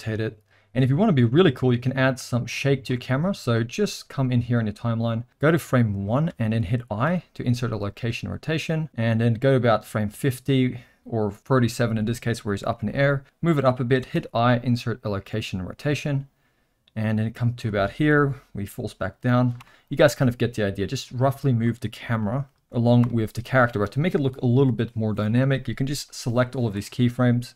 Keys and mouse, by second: 2.5 click, 3.0 middle click, 4.6-6.3 drag, 8.8-11.4 drag, 12.7 g, 14.1 i, 16.1-17.6 drag, 18.1 g, 20.8-21.6 drag, 22.3 g, 26.0 click.